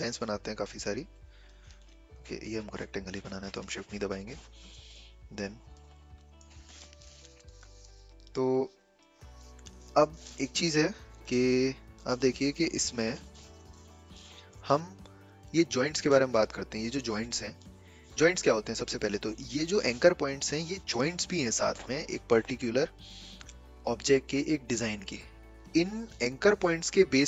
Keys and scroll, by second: 4.7 v, 12.0 v, 13.6 a.